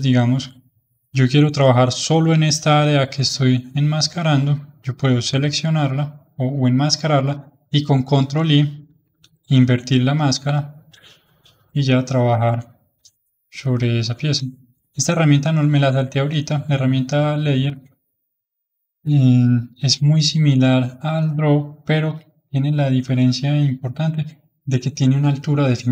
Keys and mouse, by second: 0.7-8.0 drag, 9.0 ctrl+i, 12.1-16.2 drag, 18.1-25.9 drag.